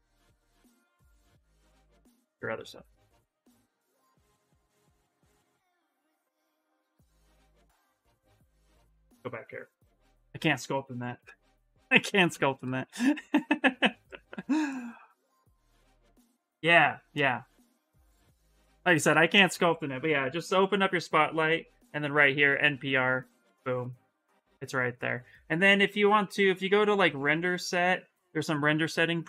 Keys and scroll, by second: 9.8 ,, 20.2 ,.